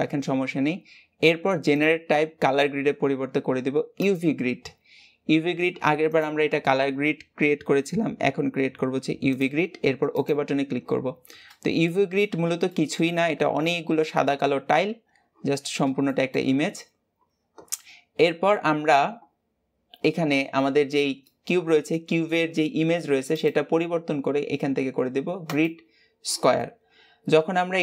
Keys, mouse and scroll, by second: 16.7-17.6 scroll down 2, 17.8 scroll up 1, 21.1-23.4 middle drag, 23.4 click, 26.4-27.8 middle drag.